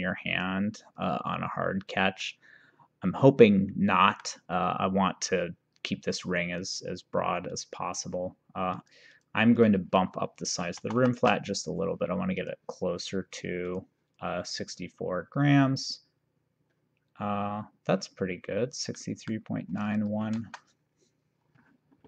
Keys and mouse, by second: 2.3 middle click, 6.7 click, 8.8 click, 10.9 BackSpace, 11.0 5, 12.5 click, 13.7 click, 19.1 middle click, 19.9 click, 20.5 ctrl+s.